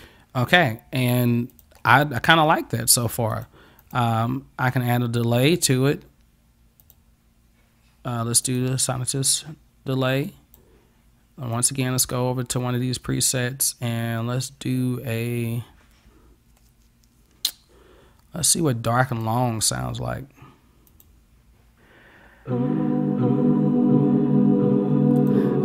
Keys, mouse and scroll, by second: 0.0 click, 1.6 click, 3.4 click, 3.9 click, 6.9 click, 8.5 click, 10.3 click, 11.6 click, 19.1 click, 20.9 click, 25.2 click.